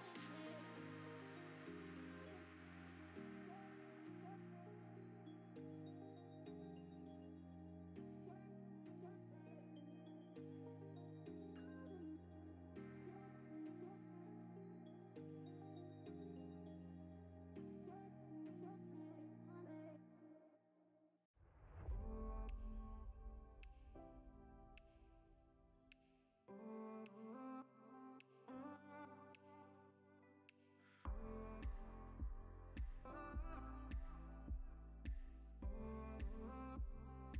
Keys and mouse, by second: 0.9 ctrl+s, 1.4 z, 2.1 click, 2.4 click, 2.5 click, 2.7 shift+click, 4.2 click, 4.7 click, 6.4 shift+a, 7.4 g, 7.7 click, 7.7 z, 8.8 click, 9.5 click, 9.8 KP_0, 10.4 click, 11.1 ctrl+b, 11.4 z, 13.0 r, 13.1 r, 14.2 click, 14.3 g, 14.4 z, 15.1 click, 15.7-20.8 typing, 16.1 alt+g, 16.2 alt+r, 16.6 click, 17.7 KP_Enter, 18.1 click, 19.1 click, 20.1 click, 20.7 click, 22.1 click, 22.2 g, 22.2 z, 22.3 z, 22.8 click, 23.7 shift+d, 23.8 r, 23.9 z, 26.1 click, 26.8 g, 26.8 z, 26.9 z, 27.6 click, 28.7 click, 29.1-32.3 typing, 29.4 alt+g, 29.5 alt+r, 30.8 Escape, 32.0 click, 32.1 middle click, 32.7 click, 33.3 middle click, 33.7-36.0 typing, 34.1 Escape, 34.9 click, 35.9 click, 36.5 click, 36.9 click, 37.2 KP_0.